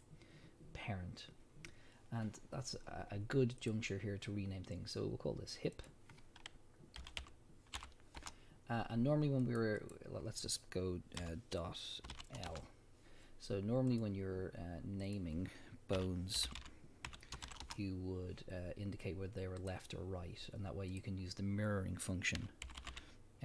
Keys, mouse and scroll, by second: 3.6 click, 5.8-14.0 drag, 8.3 Return, 12.6 Return, 15.0-19.7 drag, 17.7 Return, 20.9-23.4 drag, 22.8 o.